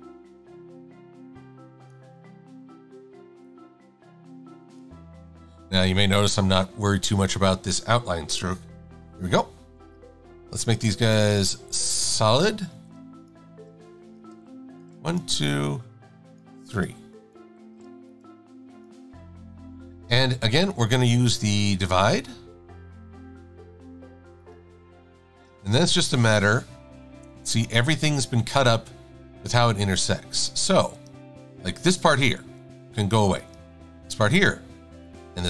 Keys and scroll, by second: 10.0 v, 12.8 v, 14.1-15.0 typing, 17.8 z, 25.6 shift+super+a, 32.5 Delete, 34.4 Delete.